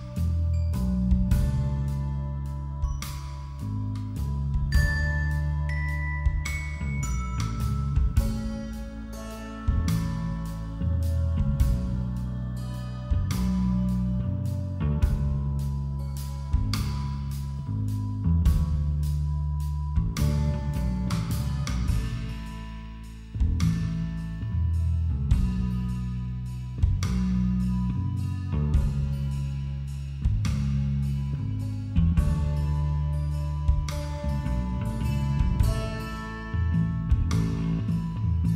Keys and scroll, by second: 38.0 b.